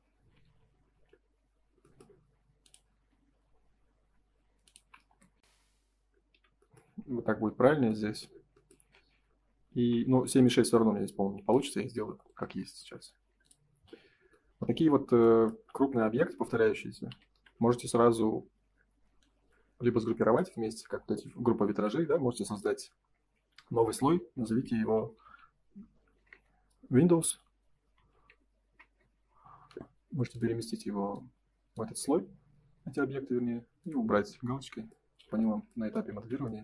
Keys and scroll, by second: 5.0 space, 5.3 Escape, 9.7 ctrl+s, 21.6 ctrl+s, 26.1 BackSpace, 28.6 Return, 35.1 F4, 36.1 ctrl+s.